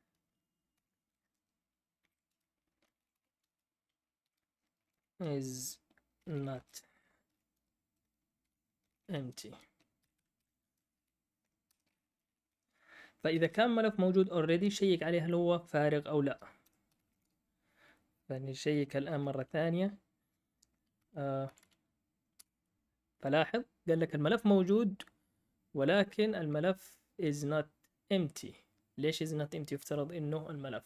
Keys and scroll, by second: 0.0-0.7 typing, 1.9-10.3 typing, 11.6 Return, 11.8-12.6 typing, 16.3-17.4 typing, 21.4 Up, 21.4 Down, 22.3 Up, 22.3 Return.